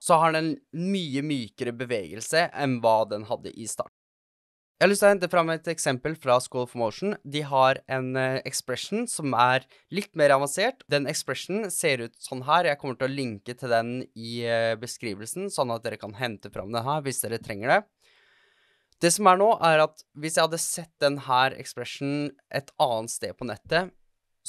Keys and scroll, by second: 4.7 space.